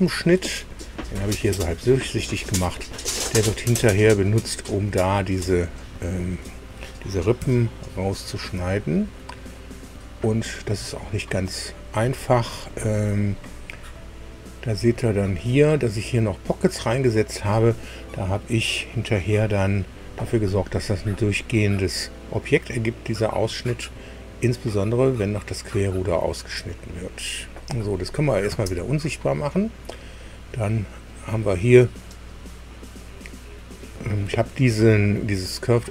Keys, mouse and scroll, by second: 0.1 9, 1.7-3.3 drag, 3.5-5.5 drag, 5.9-6.3 scroll up 2, 7.3 KP_4, 8.2 scroll down 2, 8.6 shift+click, 28.0 click, 28.4 space, 32.3 click.